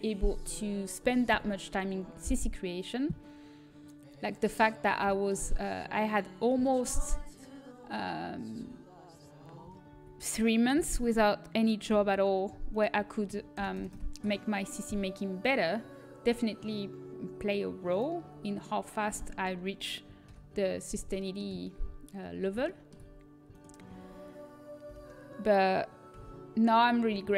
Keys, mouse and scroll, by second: 4.2-5.9 drag, 5.9 middle click, 6.9 middle click, 7.5 middle click, 9.8 a, 12.4 l, 12.4 h, 13.0-14.8 drag, 13.5 ctrl+KP_Add, 14.1 ctrl+KP_Add, 14.8 Delete, 18.1-19.3 middle drag, 21.1 alt+h, 23.9-26.6 right drag, 24.8 g.